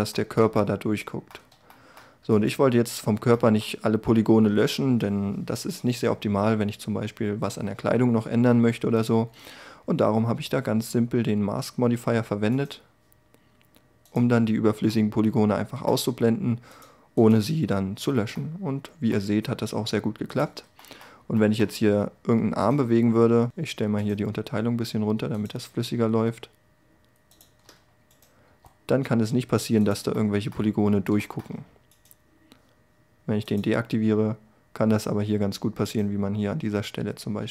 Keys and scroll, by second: 28.0 g.